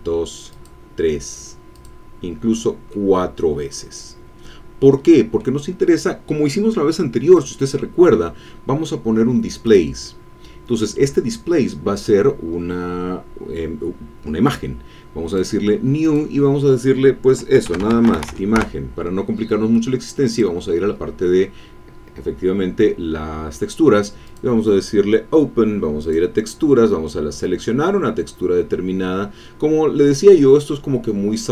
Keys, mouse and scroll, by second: 0.5-2.0 drag, 2.9-6.0 drag, 7.3 click, 9.6 click, 11.6-12.3 scroll down 4, 15.2 click, 16.0 click, 17.7 shift+i, 18.0 shift+g, 18.1 shift+e, 18.2 shift+n, 18.6 shift+Return, 20.2 click, 24.2 click, 26.0 click, 26.6-26.9 scroll down 1, 27.6-28.2 scroll down 1, 29.0-31.1 scroll up 2.